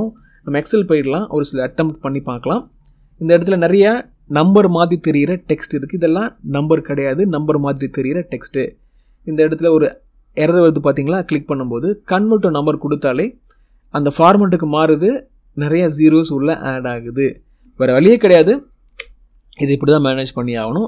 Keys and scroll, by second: 0.0 Escape.